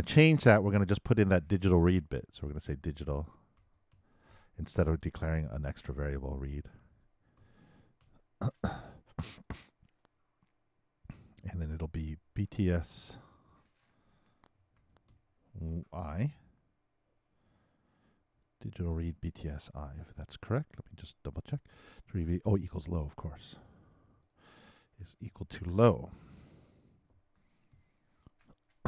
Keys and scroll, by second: 6.4-8.5 typing, 17.1 shift+], 17.8 shift+0, 26.8-28.2 typing.